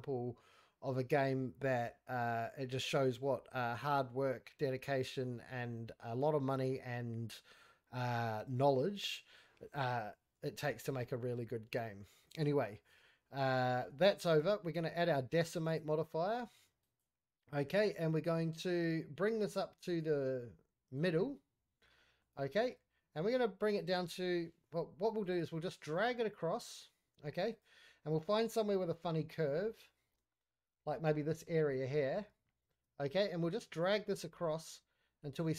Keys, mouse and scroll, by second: 10.5-11.2 scroll up 2, 10.6 middle click, 11.2-13.6 scroll down 1, 15.6-17.0 drag, 18.2-20.9 drag, 21.7 scroll up 2, 21.9 middle click, 22.4 shift+middle click, 22.8 scroll up 1, 23.6-25.2 drag, 26.4-27.5 drag, 27.8 scroll down 1, 28.1-29.2 middle drag, 29.3 scroll up 1, 29.5-29.9 middle drag, 30.0 scroll up 2, 30.3 shift+middle drag, 30.7 middle drag, 31.0 shift+scroll up 1, 31.2 shift+middle click, 31.3 shift+scroll down 1, 31.6 middle click, 31.9 scroll up 1, 32.1 scroll down 1, 32.4 shift+middle drag, 32.8 shift+scroll up 1, 33.9-35.5 drag.